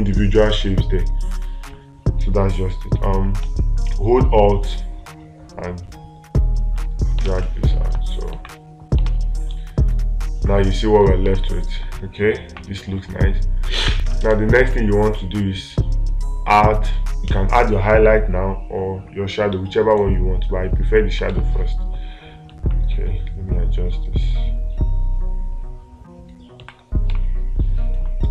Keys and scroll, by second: 7.7 space, 9.5 space, 11.7 space, 21.7 space, 27.5 space.